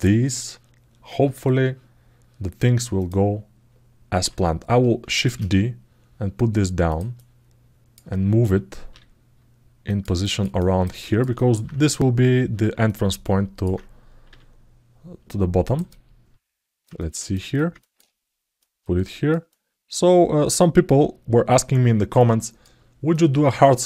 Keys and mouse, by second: 2.7 click, 6.9 alt+middle click, 9.9 alt+shift+middle click, 10.3 ctrl+alt+middle click, 11.1 alt+shift+middle click, 12.6 alt+middle click, 15.6-17.0 alt+middle drag, 17.1 alt+shift+middle click, 19.9-22.4 alt+middle drag, 22.9 alt+middle click, 23.6 alt+middle click.